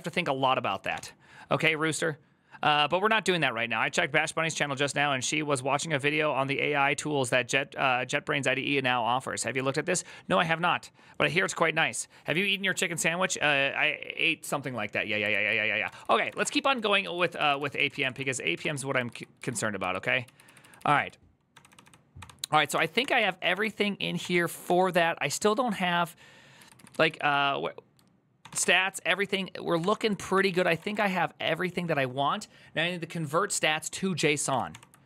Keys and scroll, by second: 0.7 alt+f, 15.2 alt+{, 15.6 ctrl+c, 15.8-17.0 typing, 17.4 ctrl+c, 17.8 ctrl+:, 18.3 typing, 18.9 ctrl+u, 19.2 ctrl+u, 20.0-21.3 ctrl+u, 21.3 ctrl+d, 21.5 ctrl+d, 22.0-24.4 ctrl+d, 26.4 ctrl+u, 26.5 ctrl+u, 26.8 ctrl+u, 28.2 ctrl+d, 28.4 ctrl+d, 30.1 ctrl+c, 30.3-31.1 typing, 34.3 ctrl+d, 34.5 ctrl+d, 35.0 ctrl+d.